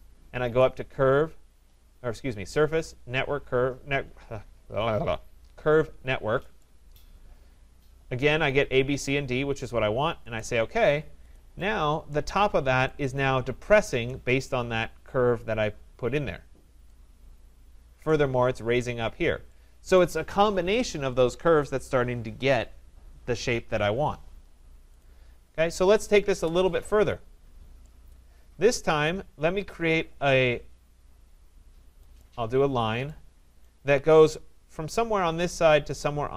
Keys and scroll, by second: 26.3 Delete.